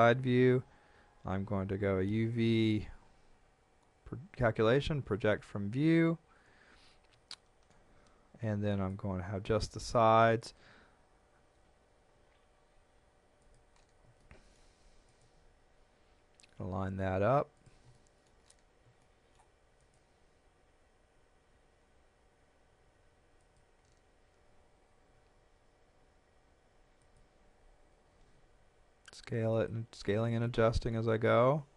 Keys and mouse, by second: 1.8 u, 5.1 click, 7.3 shift+middle click, 8.7 click, 11.4 s, 13.7 click, 14.2 shift+middle click, 15.1 click, 17.6 click, 18.0 shift+middle click, 19.0 shift+middle click, 19.8 click, 23.4 click, 25.1 s, 27.0 click, 28.3 g, 29.5 click, 30.5 shift+middle click.